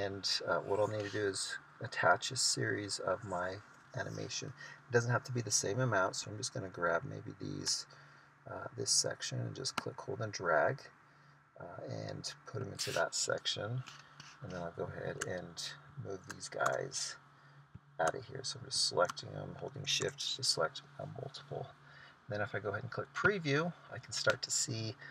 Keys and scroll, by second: 17.0 BackSpace, 20.4 BackSpace.